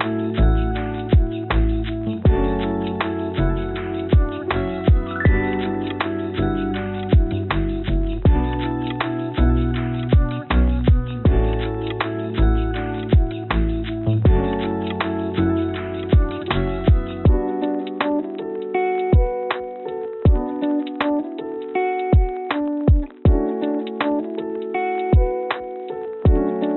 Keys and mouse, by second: 1.3-3.1 drag, 4.0 shift+d, 6.4 shift+d, 8.8 s, 10.4 g, 11.8 click, 12.7 s, 14.1 g, 15.4 g, 17.8 click, 19.0 click, 25.1 click, 25.8 g.